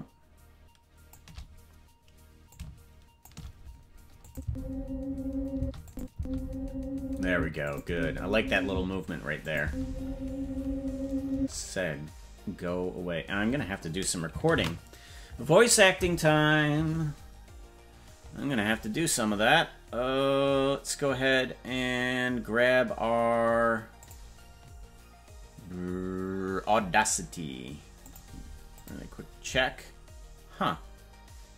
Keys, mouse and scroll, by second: 2.5 shift+click, 4.2 click, 4.4 space, 5.6 space, 5.8 click, 6.1 space, 7.3 space, 7.6 click, 7.8 space, 8.7 space, 9.4 click, 9.6 space, 11.3 space, 16.7 ctrl+s.